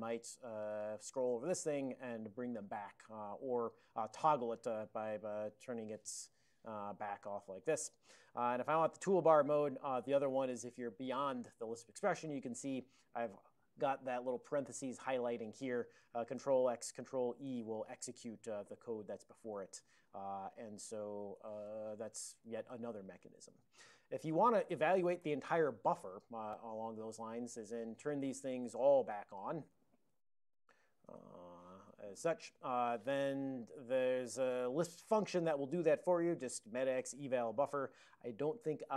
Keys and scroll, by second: 0.7 ctrl+b, 0.9 ctrl+b, 1.8 ctrl+alt+x, 4.7 ctrl+alt+x, 5.9 alt+f, 6.0-6.9 typing, 7.2 ctrl+alt+x, 8.4 ctrl+p, 8.5 ctrl+p, 9.0 alt+b, 9.5 ctrl+d, 9.7 1, 10.6 ctrl+f, 16.4 ctrl+x, 17.5 ctrl+e, 21.1 alt+b, 21.4 ctrl+d, 21.7 0, 22.3 ctrl+f, 22.5 ctrl+x, 22.8 ctrl+e, 27.3 alt+b, 28.1 ctrl+d, 28.4 1, 28.7 ctrl+n, 29.0 BackSpace, 29.2 1, 29.5 ctrl+n, 29.9 ctrl+f, 30.1 ctrl+d, 30.3 ctrl+d, 31.1 1, 32.5 c, 37.8 super+j.